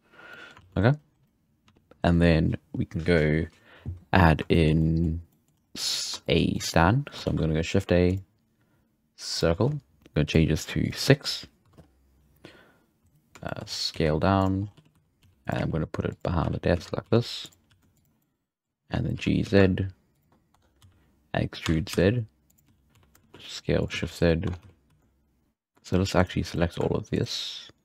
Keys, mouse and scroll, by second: 0.3-0.6 middle drag, 0.6 alt+a, 1.6 z, 1.9 scroll down 1, 4.0 scroll down 2, 4.3 scroll up 2, 4.5-5.5 shift+middle drag, 5.5-5.8 scroll up 2, 5.8 middle drag, 6.1-6.5 scroll down 3, 6.2 shift+middle click, 6.5-7.2 middle drag, 7.2 shift+a, 10.2-13.0 drag, 13.4 shift+middle drag, 13.6 scroll down 1, 13.9 s, 14.6-15.2 scroll up 4, 15.2-17.6 typing, 18.2-19.2 middle drag, 19.1 g, 20.5 Tab, 20.8-24.9 typing, 24.4 Tab, 25.4-25.8 scroll up 2, 25.8-26.5 shift+right drag, 26.5-27.1 middle drag, 27.1-27.8 shift+right drag.